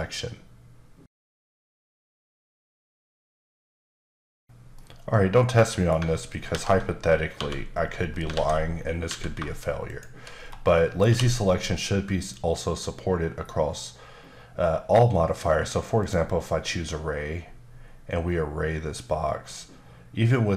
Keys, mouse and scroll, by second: 6.5 alt+h, 7.9-8.2 scroll down 2, 8.3 alt+a, 8.7 scroll up 3, 9.0 a, 9.8 shift+click, 10.3-10.7 scroll down 3, 10.7 middle click, 16.0 click.